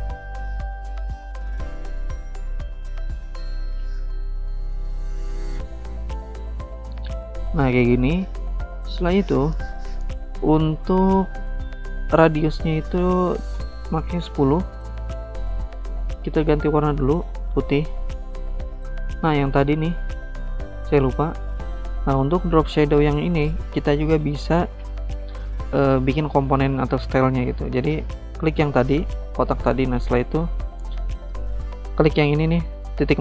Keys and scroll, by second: 12.9-13.7 typing.